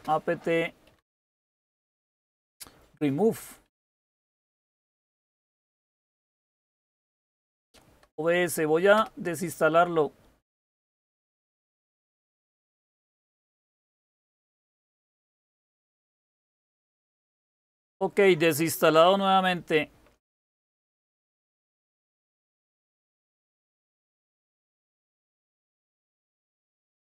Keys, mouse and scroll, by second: 0.0-1.8 typing, 3.6 Tab, 3.7-5.9 typing, 8.8 typing, 13.2-13.9 typing, 22.0 super+1, 23.7-24.7 typing.